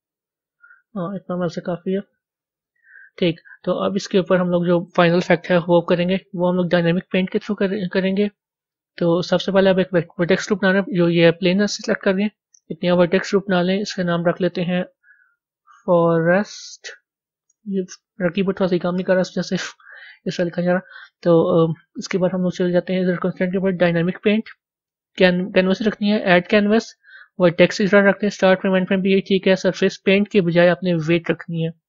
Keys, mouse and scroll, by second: 0.0-2.3 drag, 2.3 z, 11.4 click, 13.5 click, 14.0-17.4 drag, 24.1-26.3 drag, 31.1-31.8 drag.